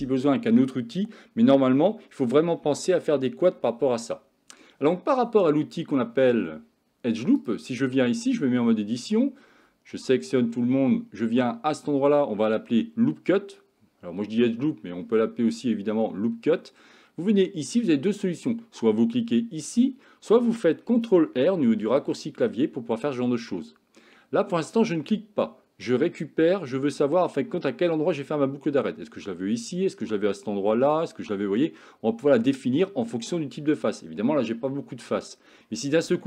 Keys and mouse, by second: 7.4 click, 8.4 Tab, 10.0 a, 21.9 ctrl+r.